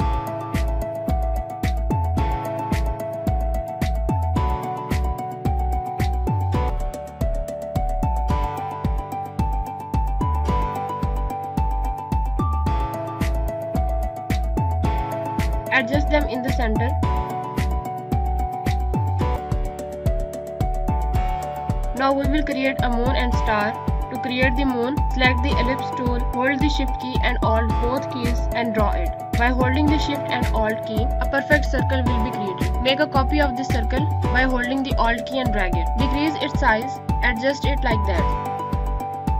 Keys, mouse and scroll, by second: 2.0 click, 8.6 click, 15.6 click, 16.3 Right, 17.8 click, 23.6 right click, 25.6 click, 27.5-27.9 alt+scroll up 2, 28.0 click, 28.7 ctrl+z, 30.0 shift+click, 32.8 click, 33.9 alt+click, 36.6 shift+click, 38.3 Left.